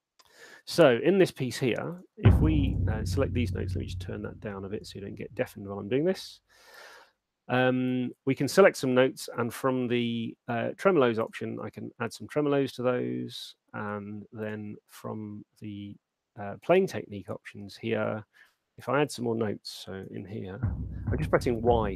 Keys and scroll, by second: 0.5 super+2, 20.3 6.